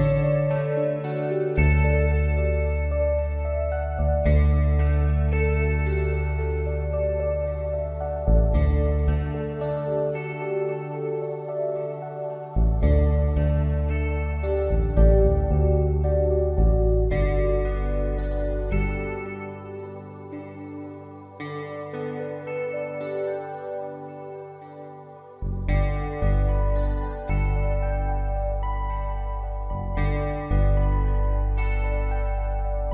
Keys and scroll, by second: 1.1 ctrl+t, 8.6 Return, 14.1 ctrl+d.